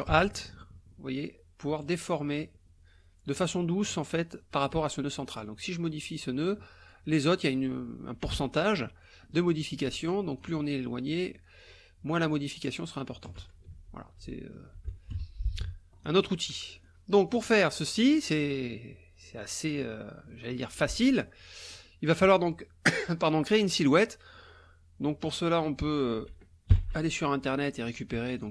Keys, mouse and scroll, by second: 5.6-7.1 alt+drag, 9.0-10.6 alt+drag, 11.6-13.6 alt+drag, 13.7 ctrl+alt+z, 14.8 ctrl+z, 15.1 ctrl+F1, 15.5 ctrl+KP_Subtract, 16.3 click, 17.3 click, 18.1 click, 19.5 click, 20.4 click, 21.3 click, 25.8 click, 26.7 ctrl+shift+l, 28.4 click.